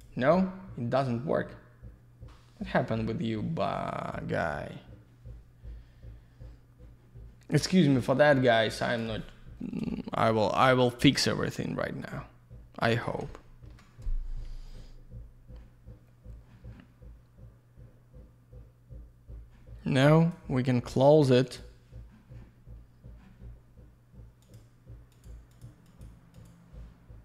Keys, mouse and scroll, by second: 8.7 click, 13.0 ctrl+shift+Escape.